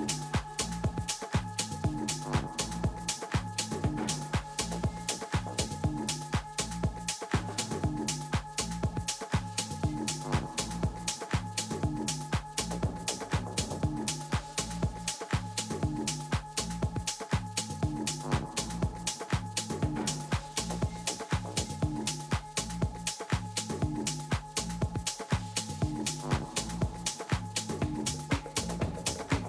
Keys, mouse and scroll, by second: 1.8-2.4 scroll up 1, 2.4 a, 2.9 a, 8.4-10.7 middle drag, 10.7 KP_1, 11.3 z, 12.1 middle click, 15.1 KP_3, 16.2 z, 17.1 z, 17.6 a, 18.0 a, 18.6 middle click, 19.2 middle click, 20.4 a, 21.0 a, 21.2 a, 21.9 a, 23.2 a, 23.6 a, 27.7 Tab, 28.3-29.4 middle drag, 29.0 z.